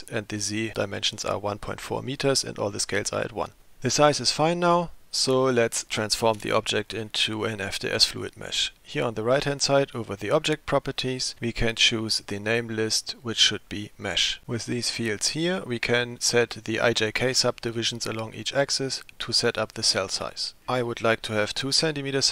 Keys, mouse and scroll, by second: 10.4 click, 12.5-14.2 drag.